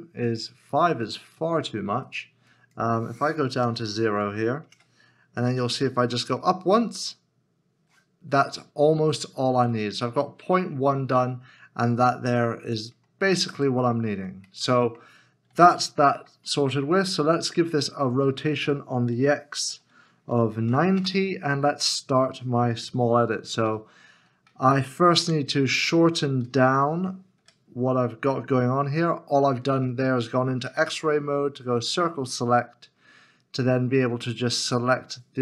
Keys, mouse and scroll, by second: 3.5 0, 4.7 Return, 9.7 middle click, 13.9-14.4 scroll down 1, 14.6 middle click, 16.0 Tab, 16.1 middle click, 17.7 r, 20.3 typing, 20.9 Return, 23.7 KP_7, 25.2 Tab, 26.4 alt+z, 27.4 1, 30.7 1, 31.4-31.7 scroll up 1, 31.7-32.4 scroll down 1.